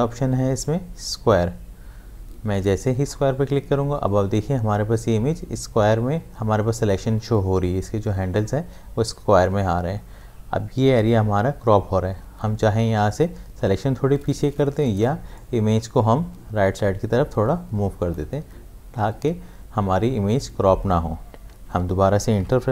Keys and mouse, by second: 2.5 click, 15.4-20.4 drag.